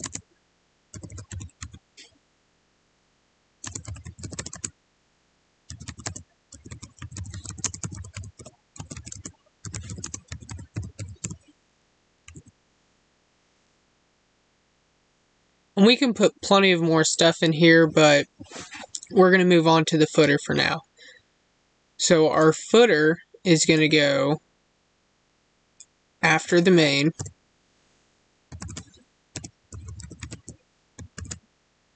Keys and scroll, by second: 3.6 space, 4.4 space, 6.0 space, 7.5 space, 9.0 space, 9.9 space.